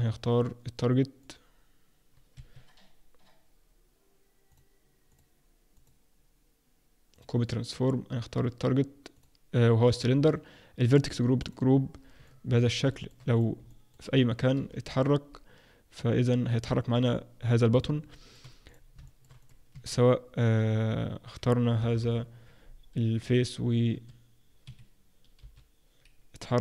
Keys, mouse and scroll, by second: 1.2 click, 4.5 click, 5.1 click, 9.1 click, 10.8 click, 12.2 middle click, 12.9 shift+middle click, 13.3 click, 13.7 middle click, 14.5 g, 17.3-18.0 scroll up 3, 18.1 middle click, 18.7 click, 19.0 shift+middle click, 19.3 click, 19.7 Tab, 22.0 ctrl+KP_Add, 23.9 s, 25.4 g.